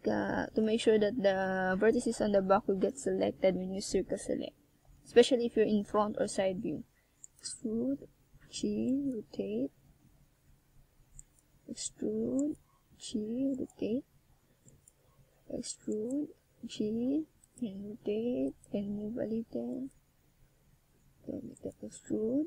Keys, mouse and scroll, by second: 4.7 Tab, 7.0 e, 8.2 click, 9.6 click, 10.9 s, 12.6 click, 13.2 e, 14.2 click, 15.3-15.8 scroll down 2, 15.8 e, 18.5 click, 19.0 s, 20.0 click, 20.4-21.3 shift+scroll up 4, 21.3 e, 22.2 click.